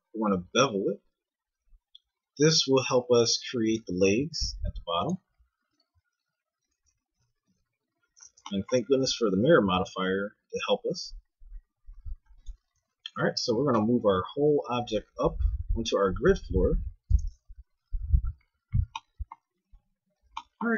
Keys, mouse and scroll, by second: 4.0 a, 4.3 ctrl+Tab, 7.1 KP_2, 7.4 KP_1, 9.7 e, 12.8 Tab, 13.5 g, 19.7 a, 20.0 z, 20.6 z.